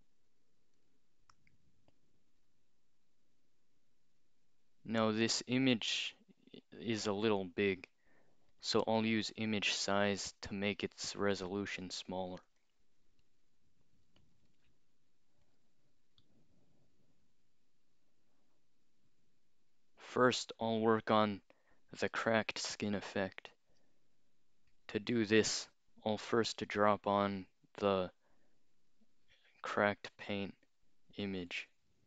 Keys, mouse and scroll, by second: 0.8 click, 1.4-1.9 scroll up 2, 8.5 click, 10.1 click, 11.3 click, 12.5 click, 12.6 click, 13.7-15.0 typing, 15.5 click, 24.7 click, 25.5 click, 28.8 click, 30.4 click, 31.3-31.7 scroll down 2.